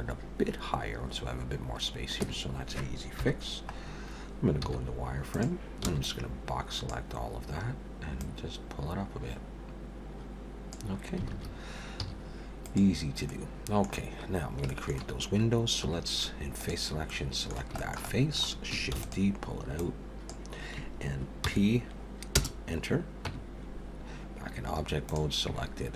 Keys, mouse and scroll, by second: 2.2 Tab, 3.2 KP_1, 3.8-4.3 scroll up 2, 4.6 z, 5.8 b, 8.2 click, 11.3 alt+a, 12.0 z, 13.3 middle click, 14.3 scroll down 1, 14.7 shift+middle click, 15.8 3, 16.6 click, 17.1 middle click, 17.8 shift+middle click, 18.0 shift+middle click, 18.9 shift+d, 19.8 click, 21.4 p, 23.3 Tab, 25.1 click.